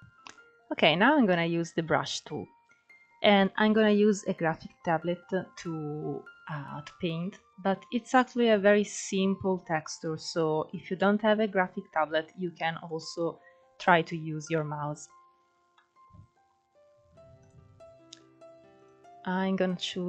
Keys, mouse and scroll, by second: 3.5-5.8 middle drag, 5.8-6.3 scroll up 2, 6.3 scroll down 3, 6.7 middle click, 7.3 scroll up 2, 7.9-12.5 middle drag, 12.5-12.8 scroll up 1, 12.8-14.2 middle drag, 14.2 scroll down 2, 14.6-16.3 shift+middle drag, 16.3 click, 17.0-17.6 scroll down 2, 17.6 click.